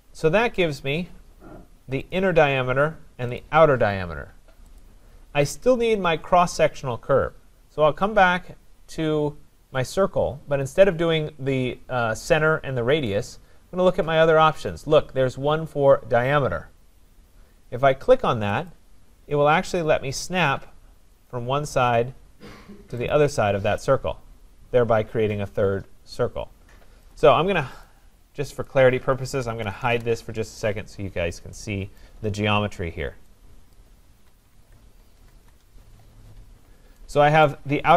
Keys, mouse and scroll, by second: 0.3-1.0 scroll, 2.1 click, 3.4 click, 4.8 click, 13.3 click, 18.7 click, 21.3 click, 23.2 click, 27.1 click, 27.9 click, 28.7 click, 29.2-30.3 typing, 31.1 scroll, 31.2 Return, 32.0 right click, 32.3-32.9 scroll, 33.8 middle click, 33.8 click, 34.6 z, 35.0 Return, 35.3 s, 35.5 Return, 36.6-37.1 scroll, 37.1-37.4 scroll, 37.5 right click.